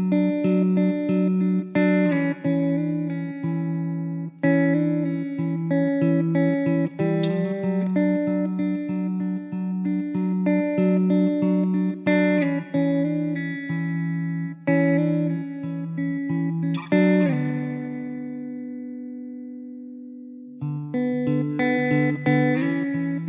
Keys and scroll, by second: 0.3 `, 1.2 s, 3.7 s, 5.4 s, 9.0 s, 10.2 Tab, 12.9 ctrl+z, 14.2 ctrl+r, 16.5 alt+z, 20.8 alt+z, 21.6 2, 23.0 ctrl+b.